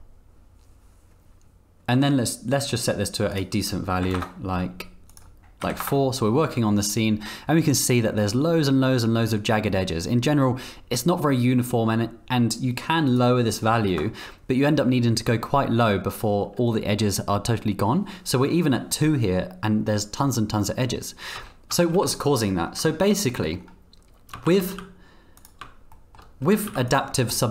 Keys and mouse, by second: 2.9 click, 3.7-4.7 drag, 5.1-6.3 drag, 13.1-14.9 drag, 21.3 Tab, 21.7 Tab, 21.9 z, 22.9 shift+click, 23.4 click, 24.5 shift+d, 25.9 shift+click, 26.4 g.